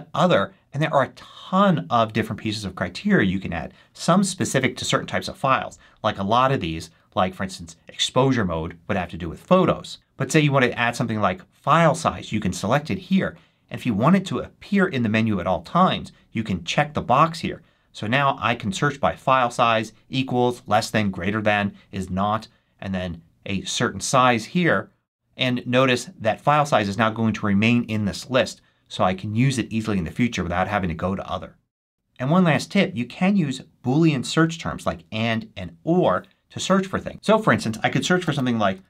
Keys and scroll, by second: 37.9-38.8 typing.